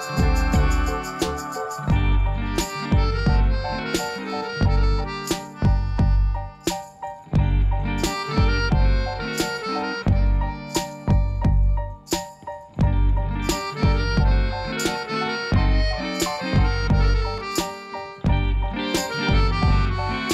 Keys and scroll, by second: 7.7 Tab, 8.7 1, 8.9 shift+z, 11.0-13.1 typing, 12.4 Tab.